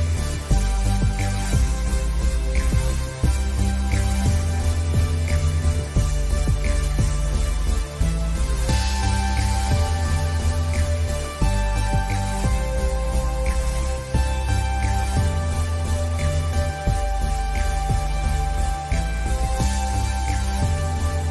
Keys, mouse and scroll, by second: 4.2 alt+scroll down 1, 4.5 click, 5.9 scroll down 1, 6.2 alt+scroll up 2, 7.0-7.8 scroll down 2, 8.2 scroll up 1, 8.8 click, 10.3 alt+scroll down 1, 10.6 ctrl+s, 10.8 click, 12.6 ctrl+shift+[, 14.5 click, 16.2 alt+scroll down 1, 16.3 space, 16.5 click, 16.9 alt+scroll up 1, 17.0 click, 18.3 click, 19.2 alt+scroll up 1, 19.3 click, 20.8 click.